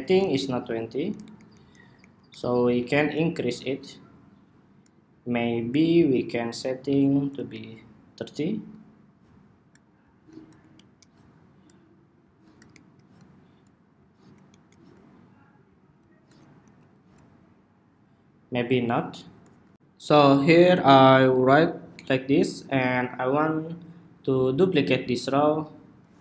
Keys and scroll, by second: 0.1 alt+shift+Left, 0.3 alt+shift+Left, 0.8 alt+Right, 0.9 alt+Right, 1.1 alt+Right, 1.7 alt+Right, 2.0 alt+Right, 7.2 alt+shift+Right, 16.3 alt+shift+Left, 19.5 shift+super+2.